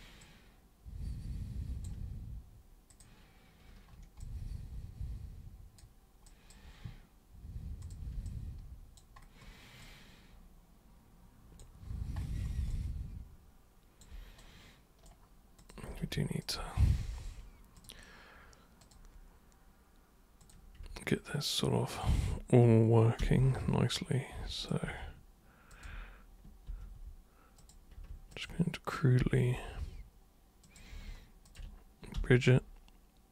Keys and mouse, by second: 0.2-1.8 alt+super+drag, 2.9 super+click, 4.2-5.8 alt+super+drag, 6.3 alt+super+click, 7.8 super+click, 8.3 alt+super+click, 9.8-11.6 alt+super+drag, 12.7-14.0 alt+super+drag, 14.4 super+right click, 15.6 super+click, 16.4 ctrl+shift+super+click, 17.8 super+click, 18.8 super+click, 20.4 super+click, 21.9 ctrl+shift+super+click, 23.2 super+g, 24.6 super+click, 25.7 ctrl+shift+super+click, 26.7 super+g, 27.6 super+click, 28.3 ctrl+shift+super+click, 29.2 super+g, 30.7 super+click, 31.5 ctrl+shift+super+click, 32.2 super+g.